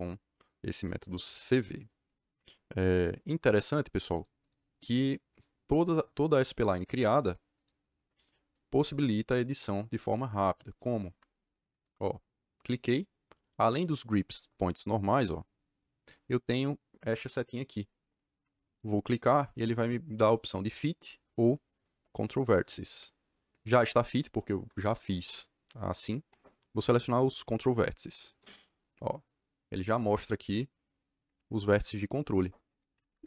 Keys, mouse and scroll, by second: 4.1 click, 4.4 click, 6.8 Escape, 7.5 click, 9.5 click, 11.0 Escape, 11.6 click, 19.0 click, 28.2 click, 32.9 Escape, 33.0 Escape.